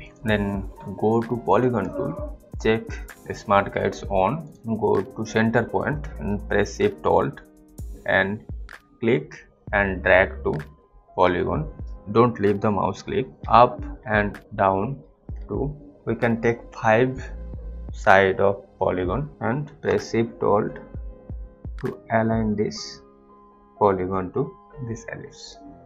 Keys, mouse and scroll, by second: 0.0 click, 1.4 click, 7.1 alt+click, 13.3 Up, 13.9 Up, 14.9 Down, 15.3 Up, 15.9 Down, 16.6 Up.